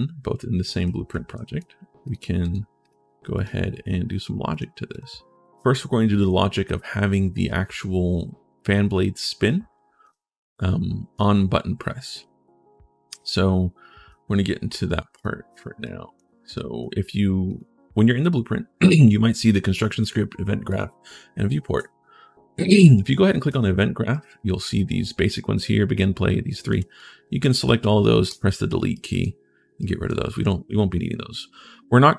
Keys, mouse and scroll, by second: 0.1 a, 0.6 a, 0.7 right click, 0.9 a, 1.1 a, 1.8 click, 2.2 click, 2.6 click, 3.1 click, 4.3 click, 4.7 click, 9.6-10.4 typing, 9.8-10.9 right drag, 11.9-13.9 right drag, 11.9 s, 14.9 click, 15.6 right click, 16.3 right click, 17.2 click, 19.2 click, 19.8 click, 20.4 click, 23.2 click, 23.9 right click, 24.6 scroll up 1, 26.2 right click, 26.8 click, 28.7 right click, 29.2-29.5 scroll down 1, 29.6 right click, 30.0-30.6 scroll up 1, 30.6-31.3 scroll down 1.